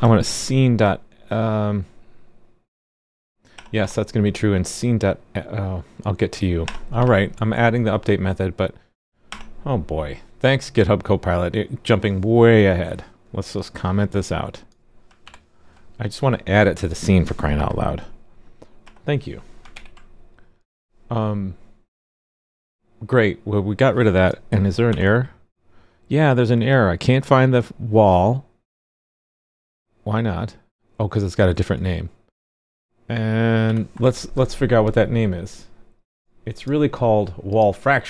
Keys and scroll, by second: 15.2 super+/, 19.7 super+s, 24.8 alt+super+j, 33.6 alt+super+j.